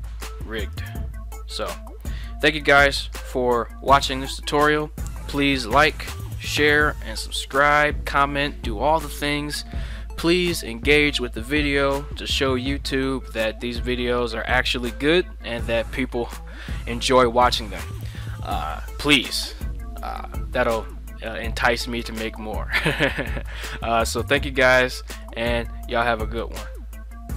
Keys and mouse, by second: 0.8 right click, 3.6-4.4 drag, 4.4 middle drag, 24.0-25.3 middle drag.